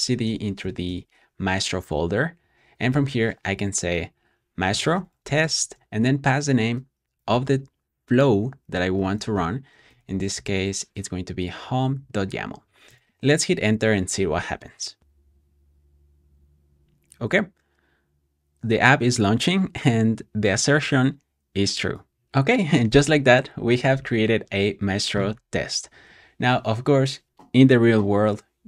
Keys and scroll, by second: 0.0-1.1 typing, 2.5-10.6 typing, 12.8 Return, 16.4-17.2 typing.